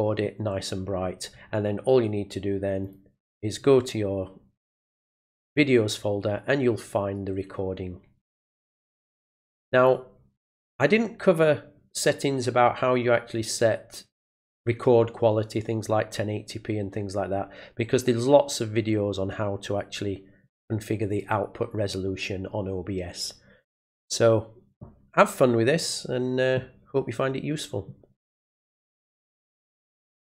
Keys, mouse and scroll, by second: 2.8 click, 5.4 click, 9.7 click, 10.9 click, 13.0 click, 20.4 click, 21.1 click, 30.2 click.